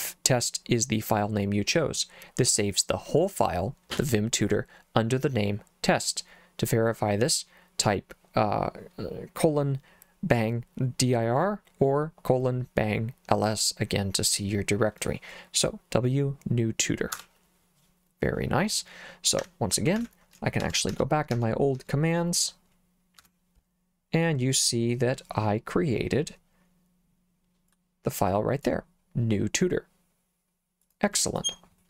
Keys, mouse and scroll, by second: 17.2 Return, 19.4 Escape, 20.0 shift+;, 20.6 Up, 20.9 Up, 21.3 Up, 21.8 Up, 23.2 Return, 27.7 click, 30.9 click, 31.3 click.